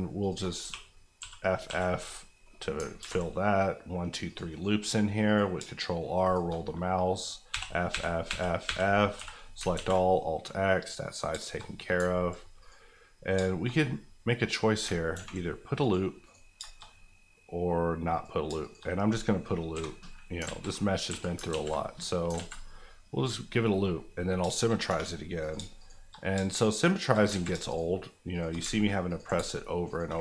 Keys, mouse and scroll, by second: 0.3 click, 0.6 f, 1.2 f, 1.6 f, 2.1 middle click, 2.8 ctrl+middle click, 3.0 ctrl+r, 3.3 scroll up 1, 4.2 click, 4.5 right click, 5.2 click, 5.5 shift+click, 6.3 click, 7.5-9.1 typing, 9.7 alt+x, 10.1 middle click, 11.3 shift+middle click, 11.6-12.6 scroll up 3, 12.6 click, 13.1-13.7 scroll down 3, 13.4 shift+middle click, 13.6 middle click, 14.9 ctrl+scroll down 1, 15.1 ctrl+r, 15.8 click, 16.2 right click, 16.5 shift+right click, 16.6 shift+middle click, 16.8-18.1 shift+scroll up 2, 18.1 click, 18.4 shift+click, 18.8 click, 19.7 j, 20.3 alt+j, 20.5 alt+z, 21.1 a, 21.5 alt+x, 22.0 scroll down 1, 22.3 alt+z, 22.5 alt+scroll up 2, 24.4 shift+scroll up 1, 24.4 shift+middle click, 24.7 middle click, 24.9 2, 25.4 click, 25.5 shift+click, 26.2 click, 26.4 shift+click, 27.2 click, 27.4 ctrl+z, 27.7 shift+click, 28.3 shift+click, 28.7 ctrl+click, 29.1 ctrl+click, 29.4 ctrl+shift+click, 29.5 shift+click, 30.1 click.